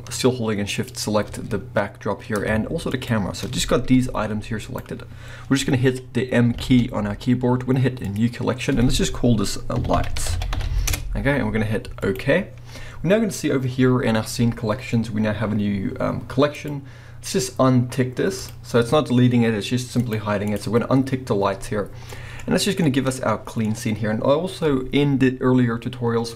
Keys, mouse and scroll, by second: 0.7 shift+click, 1.5-1.8 scroll up 1, 2.9 shift+click, 3.7 scroll down 1, 3.9 g, 4.8 right click, 5.1 scroll up 1, 6.5 m, 16.5 click, 18.4 click, 20.0 click, 20.5 click, 20.6-26.3 middle drag, 22.3 scroll up 1, 23.7 scroll up 1.